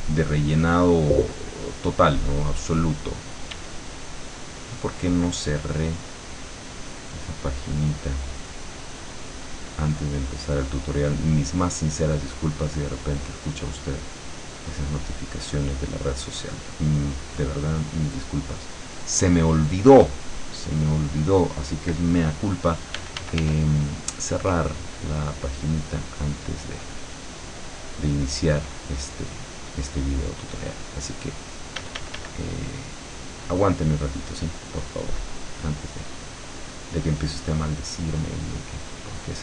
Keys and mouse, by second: 2.6 click, 3.5 d, 3.9 click, 5.5-6.8 drag, 7.0-8.4 drag, 8.6 click, 10.3 click, 12.3-13.7 drag, 13.9 click, 14.7-16.3 drag, 16.6 click, 23.0 f, 23.6-26.3 drag, 26.5 click, 27.3-31.2 drag, 31.8 d, 32.4-33.7 drag, 34.7-35.9 drag, 36.2 click, 38.5 click.